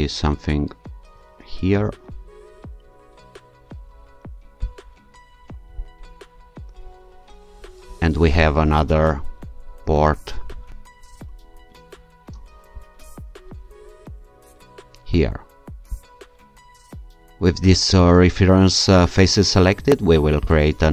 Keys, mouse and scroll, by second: 3.2-4.4 scroll up 3, 4.7 ctrl+click, 5.8-6.9 scroll down 3, 14.4-15.3 alt+shift+scroll up 1, 15.3 alt+shift+scroll up 1, 16.0 ctrl+alt+shift+click, 20.4 click.